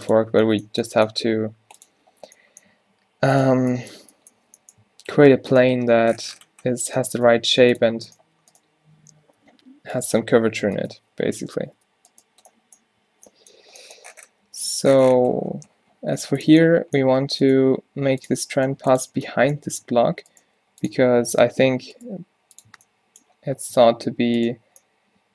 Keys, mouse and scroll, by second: 1.4 g, 2.2 z, 2.8 z, 3.0 z, 3.4-7.6 drag, 4.5 z, 5.8 g, 7.3 g, 8.2 g, 9.4 ctrl+z, 9.7 ctrl+z, 10.4 ctrl+z, 11.8 z, 13.1 z, 14.6 g, 17.7 g, 18.7 g, 19.2 Tab, 19.9 Tab, 20.5 g, 21.2 Tab, 21.6 Tab, 22.2 g, 22.7 Tab, 23.8 Tab.